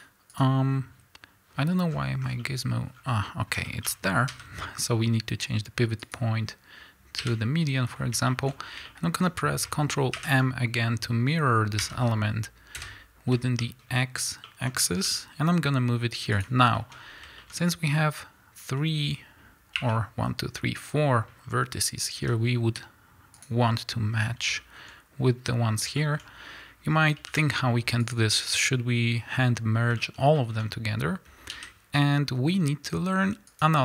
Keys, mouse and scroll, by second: 0.3 click, 0.7-1.8 scroll up 2, 1.9-2.4 scroll down 2, 2.4-8.6 middle drag, 3.0 scroll up 1, 4.3 ., 7.2 KP_1, 8.0 scroll up 1, 8.5 scroll up 1, 10.1 ctrl+m, 12.8 KP_Enter, 13.6 shift+middle click, 15.0 g, 16.4 click, 16.9 scroll up 1, 17.0-23.5 middle drag, 17.5 scroll up 1, 19.7 1, 22.2 g, 23.5 click, 23.7 scroll up 1, 24.6-28.1 shift+middle drag, 26.6-27.3 scroll down 1, 27.3 g, 28.1 click, 30.0-33.6 shift+middle drag, 30.0 click, 30.6 scroll down 1, 31.5 g, 33.6 click.